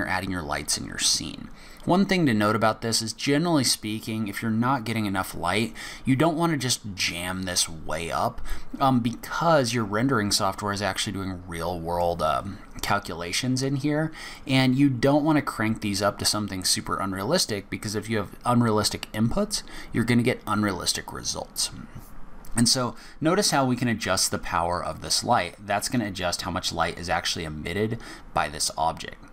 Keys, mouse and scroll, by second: 23.0 middle click, 24.9 click.